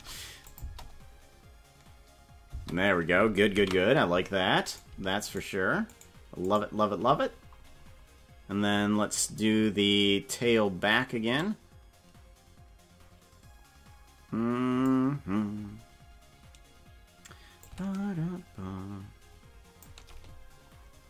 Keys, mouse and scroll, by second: 0.5 click, 0.6 space, 2.6 space, 3.6 ctrl+s, 4.8 right click, 6.1 shift+right click, 6.7 shift+right click, 11.4-14.9 drag, 17.6-19.9 shift+drag.